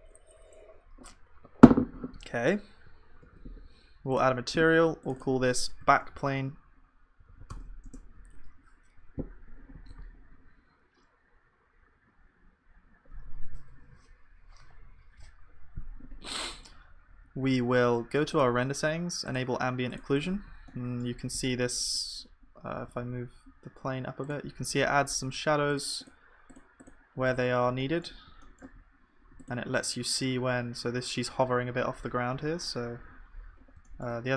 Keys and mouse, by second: 3.2 ctrl+s, 9.9 ctrl+s, 21.1-29.9 right drag, 29.9-33.2 drag, 34.1 click, 34.1 right click.